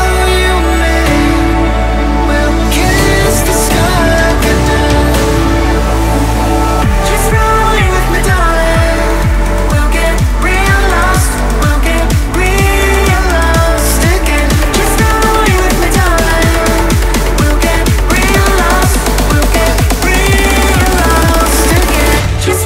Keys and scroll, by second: 0.2 ctrl+alt+f, 0.8-2.2 typing, 19.9 alt+[.